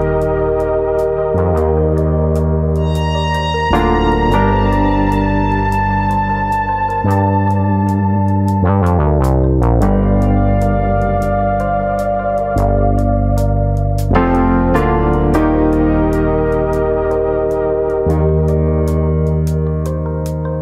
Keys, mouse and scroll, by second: 0.6 click, 1.3 s, 2.8 click, 3.5 e, 4.3 click, 4.5 s, 5.1 click, 5.5 click, 6.3 middle click, 7.2 click, 7.5 middle click, 8.0 scroll up 1, 8.3 middle click, 9.0 middle click, 10.2 click, 10.5 middle click, 11.2 click, 11.5 middle click, 12.9 middle click, 13.8 middle click, 15.5 2, 15.8 click, 16.2 shift+click, 16.5 middle click, 16.9 middle click, 17.5 click, 17.9 shift+click, 18.2 middle click, 18.9 g, 19.7 click, 19.8 middle click, 20.3 click.